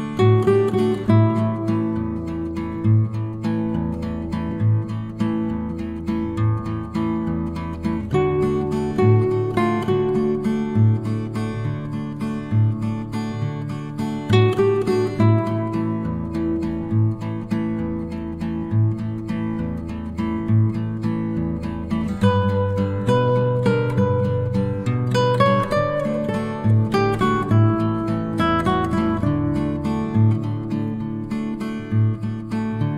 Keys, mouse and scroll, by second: 3.4 7, 4.2 BackSpace, 4.9 0, 5.0 Tab, 5.4 7, 5.8 Return, 7.1-8.0 drag, 15.4 ctrl+d, 16.1-17.6 alt+shift+drag, 21.3 ctrl+d, 22.0 click, 22.8 ctrl+z, 24.0 click, 24.4 ctrl+d, 25.4-27.0 alt+shift+drag, 30.0 click.